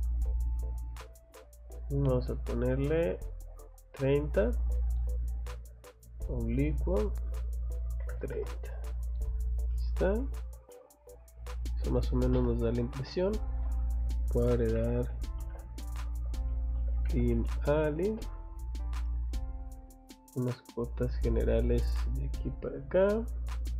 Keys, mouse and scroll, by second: 0.1 click, 0.6 click, 0.8 click, 2.0 click, 3.8 click, 4.8 click, 6.2 click, 9.2 middle click, 9.2 scroll down 2, 9.7 middle click, 10.2 Escape, 10.7 middle click, 14.2-18.2 typing, 21.1 click, 21.3 scroll down 1, 22.0 scroll up 1, 22.9 click, 23.2 scroll down 2.